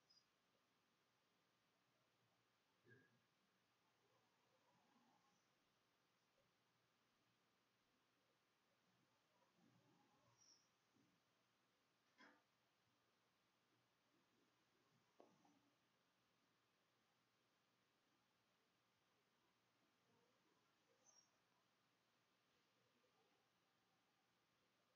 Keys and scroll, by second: 0.0-0.1 typing, 1.3-4.5 typing, 5.1 shift+Up, 5.3 shift+Return, 5.7-13.5 typing, 16.2-24.9 typing.